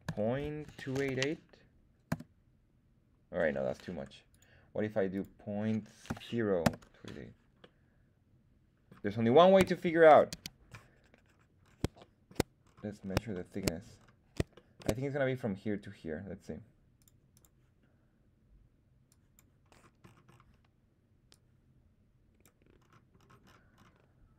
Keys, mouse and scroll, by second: 1.0 KP_8, 4.2-7.2 drag, 7.5-10.5 middle drag, 9.5 KP_1, 10.3 z, 11.2 scroll up 1, 11.7 scroll up 2, 11.9 shift+middle drag, 12.5-13.1 scroll up 2, 13.3 shift+middle click, 13.9-14.4 scroll up 2, 14.5 shift+middle drag, 16.9 click, 17.3 click, 19.0 click, 19.6-21.2 scroll down 4, 21.2-22.4 drag, 21.2-22.0 scroll down 2, 22.7-24.1 scroll up 6.